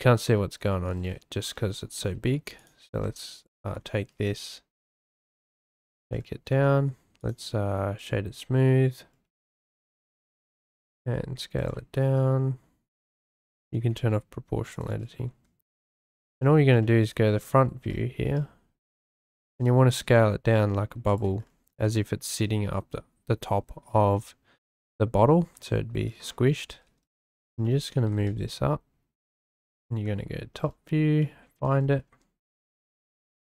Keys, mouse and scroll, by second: 0.3 Tab, 1.9 s, 2.6 click, 3.0 Tab, 3.4 click, 3.7 Tab, 4.1 s, 5.2 middle click, 6.5 Tab, 7.2-8.1 drag, 10.1 Tab, 10.5 s, 11.6 click, 13.3 click, 13.7 s, 14.7 click, 15.3 `, 16.8 shift+click, 17.9 shift+middle click, 18.3 shift+scroll, 18.9 shift+middle click, 19.5 s, 19.5 z, 21.8 shift+middle click, 25.5 Tab, 26.8 g, 26.8 z, 27.6 shift+drag, 28.0 g, 28.1 z, 29.6 `, 31.2 shift+middle drag.